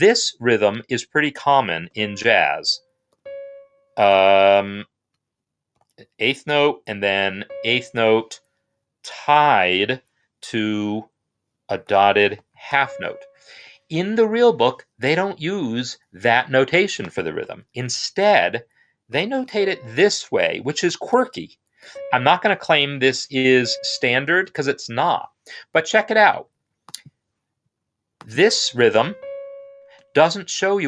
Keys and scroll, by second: 1.6 c, 4.0 ctrl+z, 4.0 d, 5.6 q, 7.1 typing, 11.6-12.4 typing, 13.3 Escape, 17.3 n, 20.2-23.3 typing, 23.8 Escape, 28.6 space.